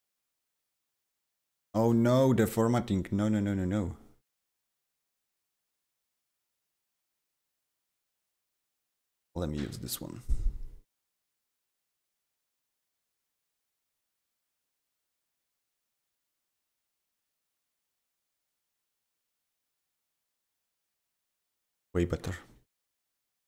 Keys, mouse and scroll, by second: 0.8 ctrl+v, 1.7 ctrl+z, 4.4 right click, 6.0 click, 7.4 click, 11.0-15.6 drag, 15.6-20.0 drag, 18.9 ctrl+c, 20.0-23.4 drag, 20.7 ctrl+v.